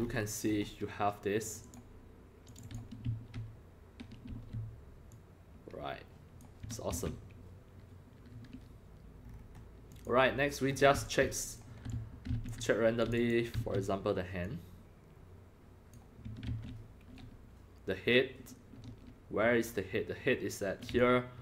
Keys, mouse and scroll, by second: 0.0 scroll up 1, 0.1 scroll, 0.4 scroll, 0.5 scroll, 0.6 scroll up 1, 1.4 click, 1.6 click, 2.5 click, 2.6 click, 3.1 e, 4.3 e, 5.1-6.4 drag, 7.0 ctrl+z, 9.2-9.5 scroll down 6, 9.9 click, 9.9 scroll, 10.8 scroll down 1, 10.8 scroll, 10.9-13.5 typing, 11.0 click, 11.6-13.1 drag, 13.1 click, 14.4-15.9 drag, 16.5 ctrl+z, 20.9 x, 21.0-21.4 drag.